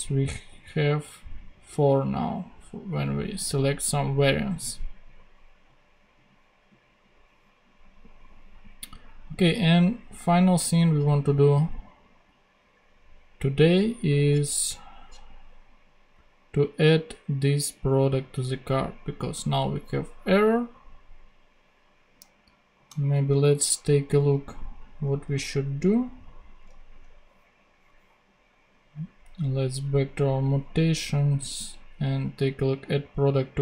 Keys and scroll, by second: 23.1 super+Tab.